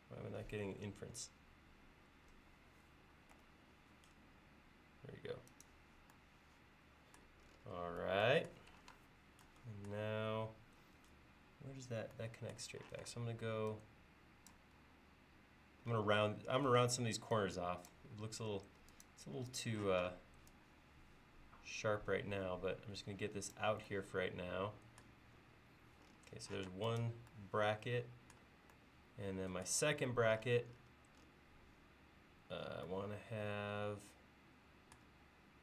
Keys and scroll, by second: 3.4 Right, 9.0 space, 13.0 p, 14.8 l, 16.7 p, 18.2 l, 19.9 p, 26.7 space, 30.1 l.